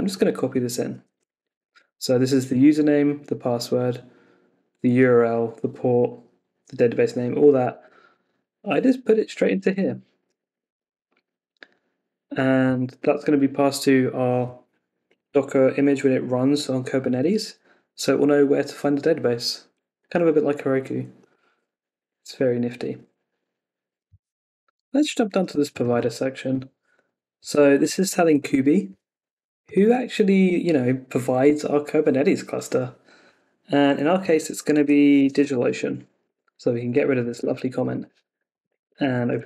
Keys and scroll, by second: 1.4 super+c, 7.8 super+Tab, 9.7 super+v, 10.3 Escape, 10.6 super+s, 34.7 super+v, 35.2 Home, 35.6 Up, 38.8 Escape.